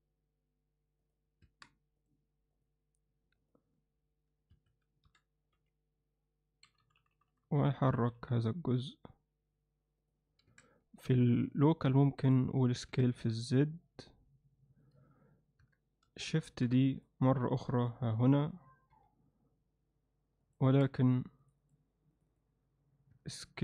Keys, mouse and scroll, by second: 1.5 Tab, 2.6-3.8 drag, 3.8 g, 5.1 o, 5.6 g, 10.5 a, 12.9 s, 15.6 Tab, 16.5 shift+d, 17.7 r, 18.9 g, 20.7 Tab, 23.2 Tab.